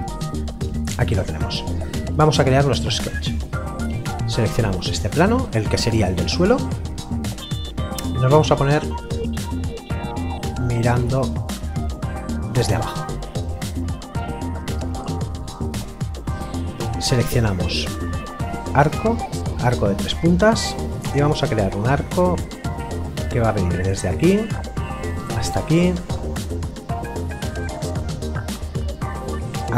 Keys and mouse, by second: 2.0 middle click, 3.2 click, 3.9 middle click, 6.3 click, 16.9 click, 23.7 click, 25.1 click, 29.5 click.